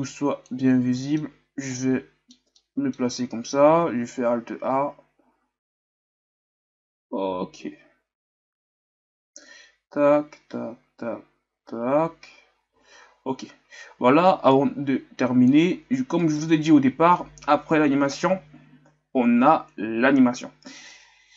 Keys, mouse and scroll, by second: 0.6-0.9 scroll down 4, 0.9-14.7 middle drag, 14.7-16.3 drag, 16.3-18.8 right drag, 21.2 click.